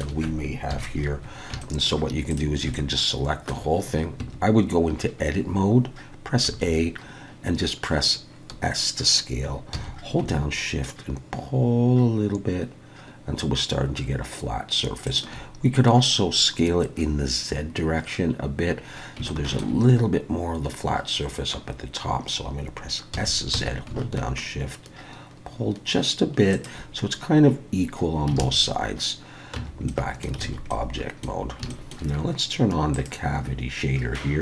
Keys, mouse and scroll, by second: 0.0 shift+scroll up 1, 0.7 KP_1, 1.3 scroll up 2, 1.6 shift+middle click, 2.3 click, 2.7 shift+middle click, 4.2 Tab, 6.5 a, 9.7 s, 19.0 scroll up 2, 19.3 shift+middle click, 23.1 s, 27.8-28.3 scroll down 3, 28.4 alt+a, 29.6 Tab, 29.9 middle click, 30.4 alt+a, 30.7 middle click, 31.7 shift+middle click, 32.9 click.